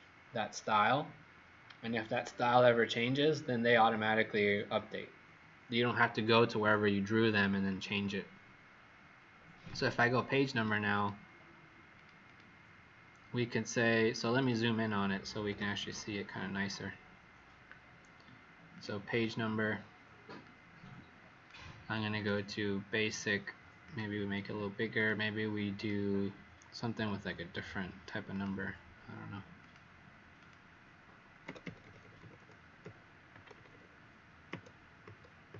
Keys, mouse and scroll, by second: 10.9 click, 11.9 click, 12.2 click, 14.3 click, 15.5 z, 15.8 click, 18.7 click, 19.1 click, 20.4 click, 25.9 click, 26.9-27.8 scroll up 12, 28.3 click, 31.4 Up, 31.6 Up, 31.8 Up, 31.9 Up, 32.1 Up, 32.8 Up, 33.3 Up, 33.5 Up, 33.7 Up, 34.4 Up, 35.0 Up, 35.4 Up.